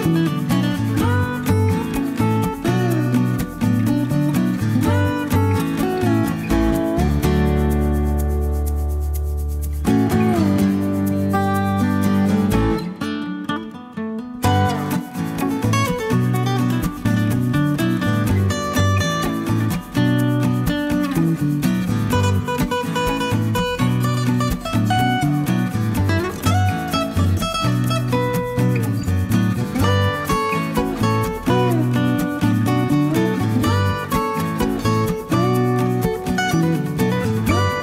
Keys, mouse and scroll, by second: 0.5 click, 2.5 click, 3.4-4.3 typing, 6.2 click, 6.6-8.1 middle drag, 8.3-10.7 typing, 11.9 2, 12.5 3, 13.8-14.3 scroll up 2, 15.5 click, 17.7 click, 18.6 2, 19.1 5, 20.5 click, 22.9 click, 23.4 click, 24.3 o, 25.3 scroll down 2, 26.0 scroll up 1, 27.7 click, 29.1 click, 30.2 click, 32.0 click, 33.9 click, 34.7 click, 35.6 click, 37.1 click.